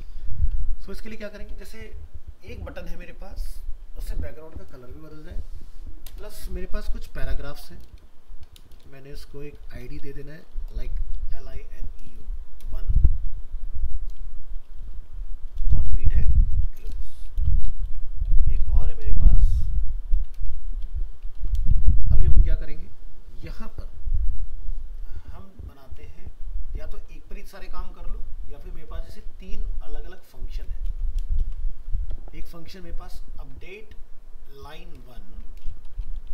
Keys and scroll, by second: 0.2 ctrl+s, 17.4 ctrl+c, 17.8 ctrl+v, 21.4 ctrl+s, 30.9 ctrl+c, 31.4 ctrl+v, 35.0 ctrl+shift+Left.